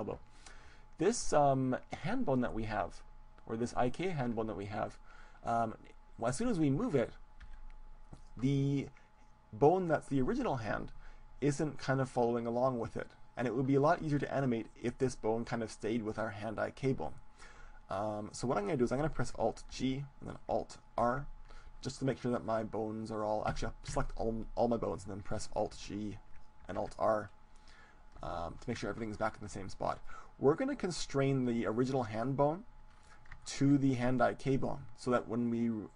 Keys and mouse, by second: 6.7 ctrl+z, 8.1 g, 8.6-10.0 drag, 9.8 middle click, 10.4-11.4 right drag, 12.7-14.6 right drag, 15.0-17.8 right drag, 19.8 alt+g, 21.0 alt+r, 23.6 a, 23.9 a, 25.8 alt+r, 26.7 alt+g, 28.3-30.2 middle drag, 30.2-32.8 right drag, 33.0-35.2 middle drag, 34.3 click, 35.0-35.9 right drag.